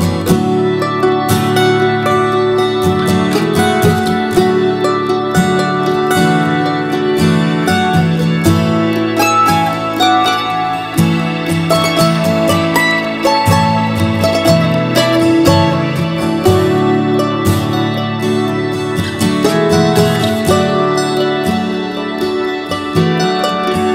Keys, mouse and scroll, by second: 22.5 ctrl+z.